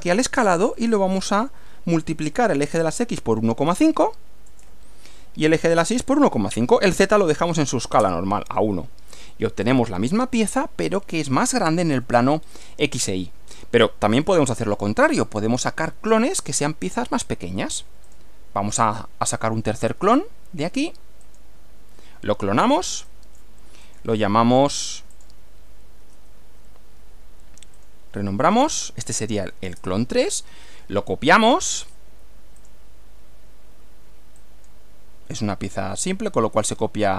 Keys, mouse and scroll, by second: 0.4 click, 2.4 1, 2.7 ,, 3.6 5, 4.4 Return, 5.8 click, 6.5-7.7 typing, 8.0 Return, 9.6 click, 10.1-11.4 middle drag, 12.4-13.2 scroll down 2, 13.4 scroll up 2, 14.2 shift+middle click, 15.2-16.4 shift+middle drag, 18.0 click, 20.0 click, 21.3 click, 23.1 click, 23.8 click, 24.1 right click, 25.1 click, 27.8 click, 28.3-29.8 typing, 32.6 click, 34.4 click.